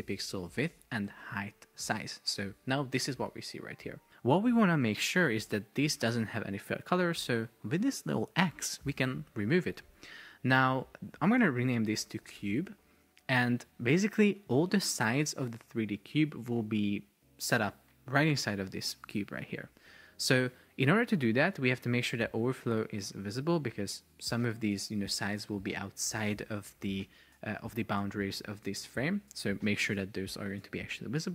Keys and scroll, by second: 0.0 Return, 0.8 super+c, 1.3 super+v, 1.5 Return, 11.5 super+r, 12.0 shift+c, 12.6 Return, 26.9 shift+super+4, 27.9 Escape.